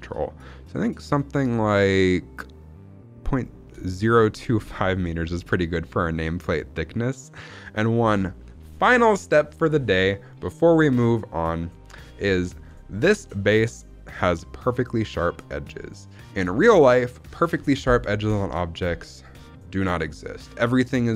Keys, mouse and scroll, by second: 4.5 scroll down 2, 4.8-8.3 middle drag, 12.6 middle drag, 12.8-13.6 scroll up 2, 15.7 scroll down 2, 15.8-17.1 middle drag, 17.3-18.8 scroll up 1.